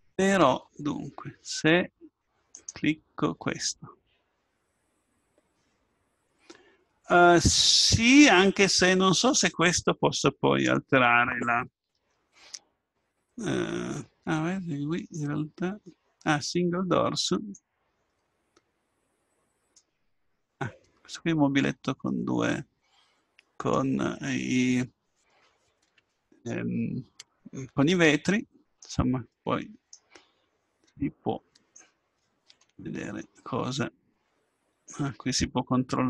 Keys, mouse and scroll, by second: 2.5-6.5 right drag, 6.5 middle click, 6.9 middle click, 17.3-19.2 drag, 21.1-22.6 middle drag, 33.9-35.5 drag.